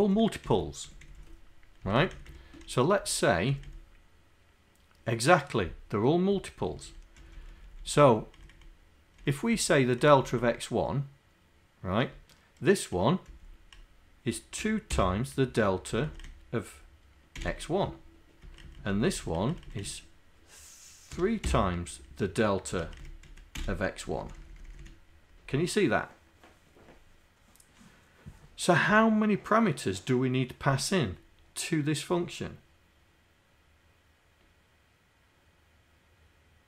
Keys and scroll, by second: 0.4 Left, 2.3 Right, 3.0 Down, 3.5 Right, 6.6 Right, 7.2 Down, 7.5 Down, 7.9 Left, 8.5 Right, 9.3 Right, 9.5 Left, 10.0 Right, 12.1 Right, 13.3 Left, 14.6 2, 15.0 KP_Multiply, 15.9 Right, 17.4 Delete, 18.4 Right, 19.1 Right, 19.8 Right, 21.1 3, 21.5 KP_Multiply, 22.7 Right, 23.3 Left, 24.1 Down, 24.6 Down.